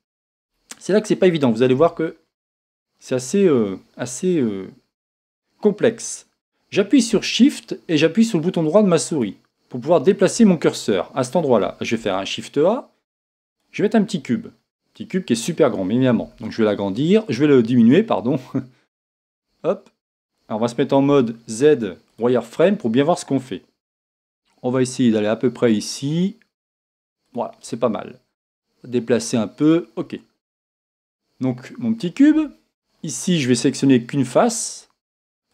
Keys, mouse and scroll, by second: 1.9 Tab, 2.1-3.2 scroll down 2, 3.2-9.6 scroll up 2, 9.6-13.7 shift+right drag, 13.7 shift+a, 14.4-14.7 scroll down 2, 14.7 middle click, 16.3 s, 19.3 click, 19.6 scroll up 2, 19.6 middle click, 22.3 z, 24.2 s, 28.4 g, 31.0-33.8 middle drag, 32.7-33.8 scroll up 2, 33.8 click, 35.2 3.